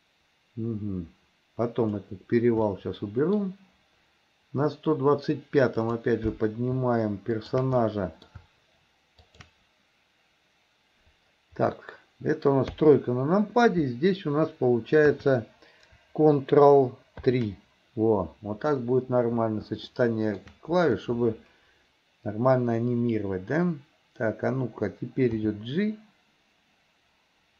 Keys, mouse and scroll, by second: 2.7 middle click, 5.9 click, 7.4 shift+click, 7.9-8.3 middle drag, 9.2 shift+click, 12.7 KP_3, 17.2 ctrl+KP_3, 19.9-20.4 shift+middle drag, 25.4 g.